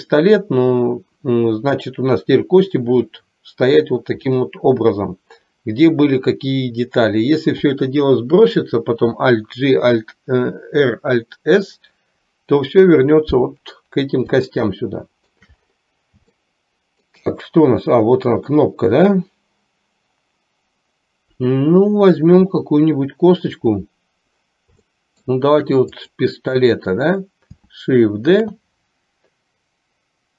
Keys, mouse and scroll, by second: 14.5-15.5 shift+middle drag, 16.4 shift+middle click, 25.0 shift+middle click, 28.4 shift+d.